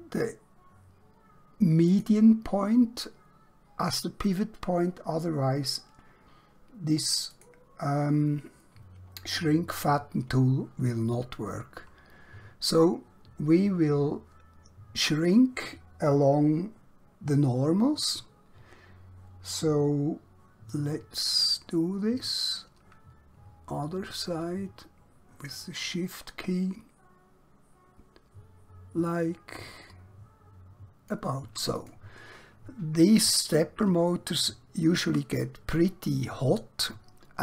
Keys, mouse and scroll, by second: 1.9 click, 7.3 click, 20.6 click, 31.7 click, 33.0-33.4 scroll down 1, 33.4-34.0 scroll up 1, 34.1 shift+middle click.